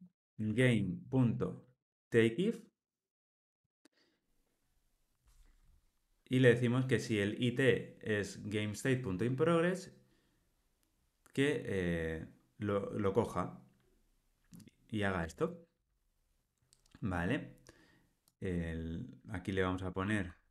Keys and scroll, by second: 3.5 Return, 15.3 Tab.